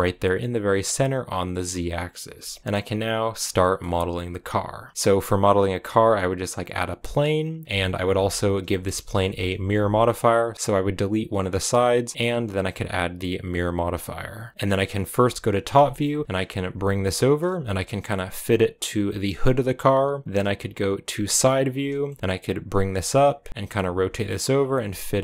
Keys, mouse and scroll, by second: 1.6 scroll down 3, 2.6 x, 3.5 middle click, 3.9-5.8 scroll up 1, 6.0 shift+a, 7.6 Tab, 8.0 ctrl+r, 8.6 middle click, 8.7 a, 9.3 b, 9.7 x, 12.5-14.5 drag, 14.5 s, 15.0 g, 15.8 shift+middle click, 15.9 scroll up 3, 16.1 s, 16.6 g, 17.4 g, 21.1 KP_3, 22.0 shift+middle click, 22.8 g, 23.7 r, 24.4 scroll up 3, 24.7 g, 25.1 r.